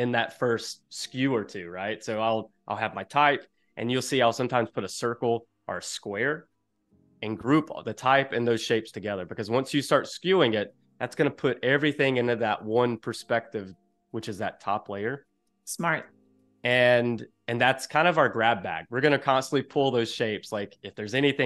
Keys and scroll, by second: 15.4 space.